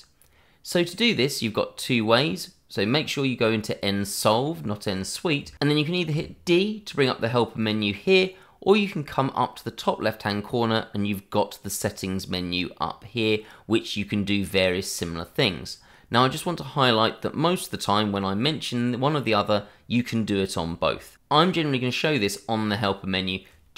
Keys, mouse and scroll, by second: 2.8 click, 6.1 d, 10.2 click, 21.1 d.